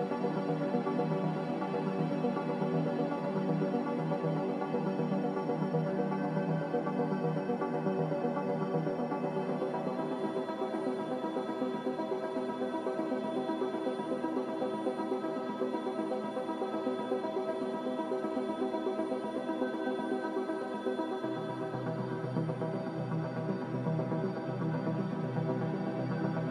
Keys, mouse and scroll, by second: 0.0-0.1 typing, 2.0 Return, 5.0 Return, 9.8-10.7 typing, 23.8-26.5 typing, 25.6 Caps_Lock.